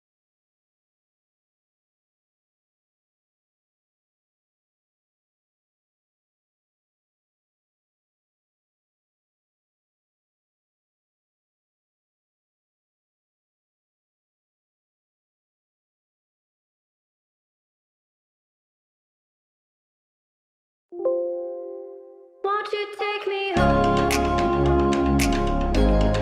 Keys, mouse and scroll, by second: 0.0-0.9 scroll down 1, 1.1-2.5 shift+middle drag, 2.5 Up, 2.7 scroll up 1, 4.4 click, 5.1-6.1 typing, 5.6 Return, 6.4-7.5 scroll down 1, 8.1-9.9 typing, 10.2 click, 10.3 click, 11.8 space, 11.9-12.3 scroll down 1, 14.2 click, 18.8 ctrl+x, 19.1 ctrl+a, 19.9 right click, 20.8 click, 24.0 scroll up 1, 24.9 click, 25.4 scroll down 1.